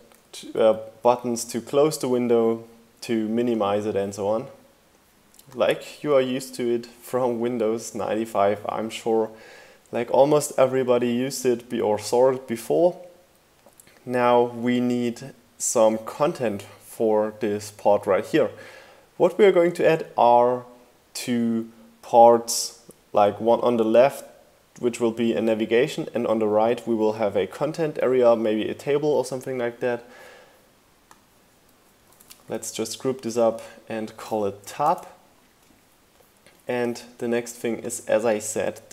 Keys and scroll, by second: 0.3 Left, 32.0 super+g, 33.7-34.8 typing.